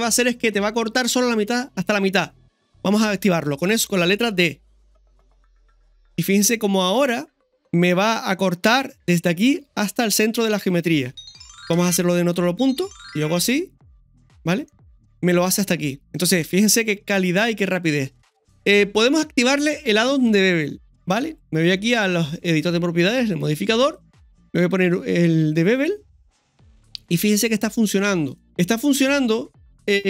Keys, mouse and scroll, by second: 6.3 scroll up 1, 11.7 KP_1, 16.2 scroll up 2, 18.2-18.9 scroll down 1, 21.1 click, 23.8-25.9 drag, 26.9-27.5 scroll up 3, 28.0 middle click, 28.3 scroll down 1, 29.0 click.